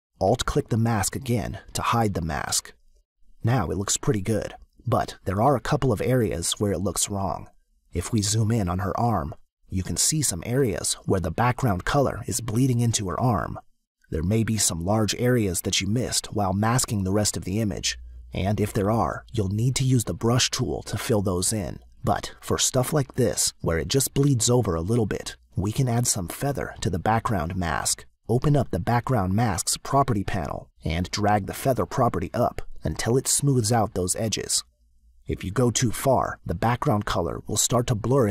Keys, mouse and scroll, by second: 1.4 alt+click, 10.9 space, 11.3 click, 13.6 space, 26.4 click, 27.9 click, 29.6 click, 31.9 click.